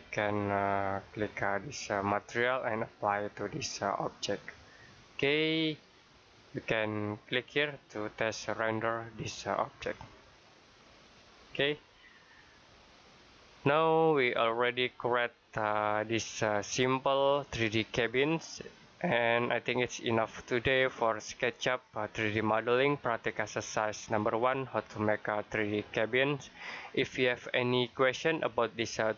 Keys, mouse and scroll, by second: 5.0 middle click, 9.5 click.